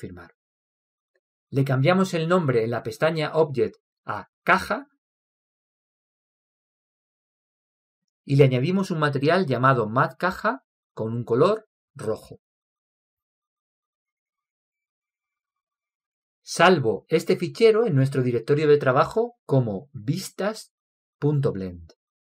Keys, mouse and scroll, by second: 0.4-2.5 middle drag, 2.5-4.1 drag, 4.2-6.9 drag, 9.7-13.2 drag, 15.5-18.4 drag, 20.9-22.2 drag.